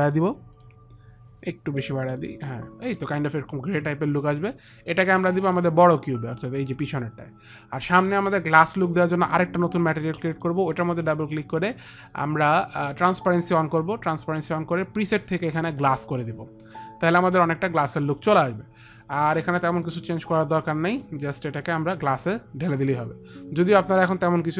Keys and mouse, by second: 0.8 click, 1.6 click, 5.0 click, 6.0 click, 9.3 click, 10.7 click, 13.3 click, 21.3 click, 22.3 click.